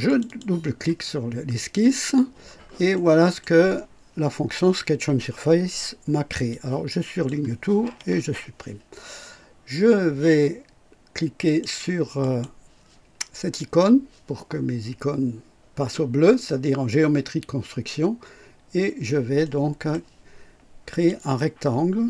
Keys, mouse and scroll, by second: 0.0 click, 2.4 scroll down 2, 2.9-3.5 right drag, 6.4 click, 7.8 Delete, 11.4 click, 12.1 click, 19.4 right click, 20.8 click.